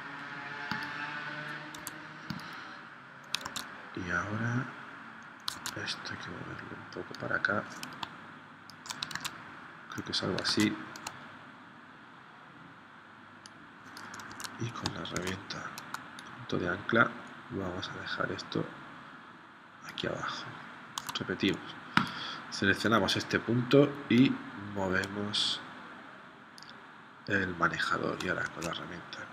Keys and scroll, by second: 1.8 a, 3.4 super+Tab, 5.6 super+Tab, 9.1 super+Tab, 10.6 super+Tab, 14.4 super+z, 15.3 shift+c, 21.1 a, 28.5 shift+c.